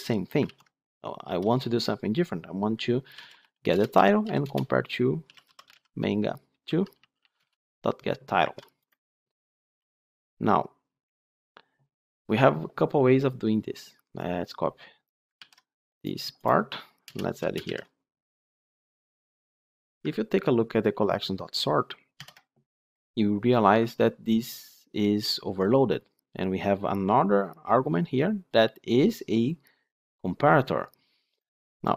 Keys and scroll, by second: 0.4 ctrl+z, 3.6 Return, 9.6 ctrl+alt+l, 15.3 ctrl+c, 17.5 ctrl+v, 22.1 ctrl+p.